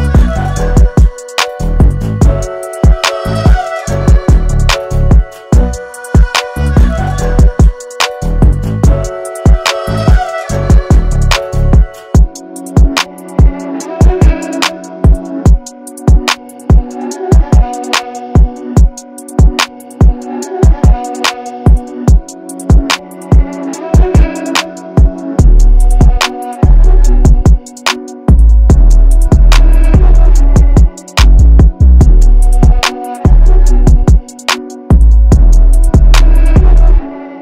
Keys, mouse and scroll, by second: 3.6 right click, 4.5 click, 5.0-7.3 typing, 5.1 click, 5.3 click, 7.0 click, 8.4 scroll down 1, 8.7 alt+space, 8.7 click, 13.6-17.1 scroll down 1, 17.1 click, 22.5 Return, 24.5 alt+scroll down 1, 24.8 space, 25.0 click, 26.2-30.6 shift+drag, 30.6-36.9 ctrl+drag, 36.9-37.4 ctrl+drag.